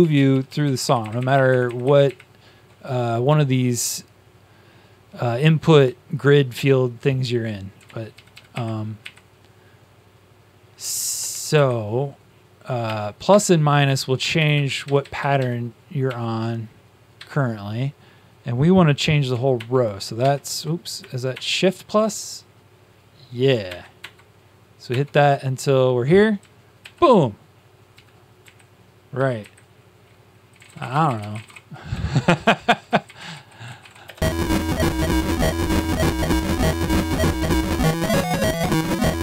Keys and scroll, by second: 0.8 ctrl+shift+Up, 1.0 ctrl+shift+Up, 1.1 ctrl+shift+Up, 8.1 ctrl+shift+Down, 8.2 ctrl+shift+Down, 8.4 ctrl+shift+Up, 8.9 ctrl+shift+Up, 11.2 Down, 12.8-13.8 typing, 17.1 -, 20.1 ctrl+-, 26.7 ctrl+shift+v, 27.8 Down, 29.1 typing, 30.2-34.3 typing.